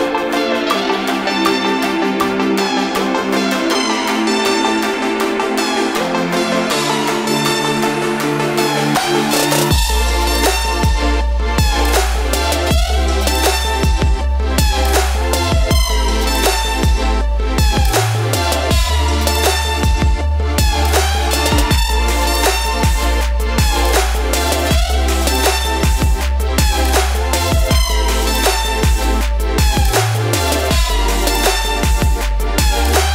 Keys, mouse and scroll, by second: 1.6 space, 8.5 Left, 13.7-25.2 alt+drag, 25.2 Right, 27.9 Down, 30.1-32.8 alt+drag, 32.8-33.1 drag.